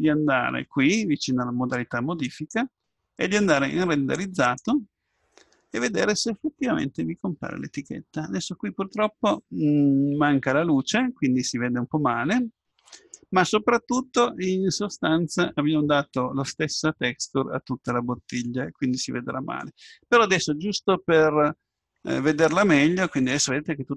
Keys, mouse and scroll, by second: 2.3-4.4 drag.